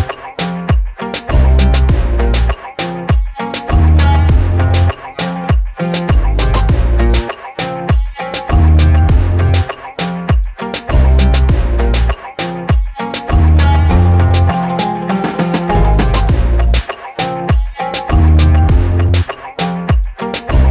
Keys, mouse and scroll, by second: 0.1-2.3 alt+drag, 2.5 alt+click, 3.3 scroll down 2, 3.6 alt+click, 4.0 shift+right click, 4.8 scroll down 3, 5.0 alt+click, 6.6-9.8 alt+drag, 10.4 alt+click, 13.9 alt+click, 16.0-20.2 drag.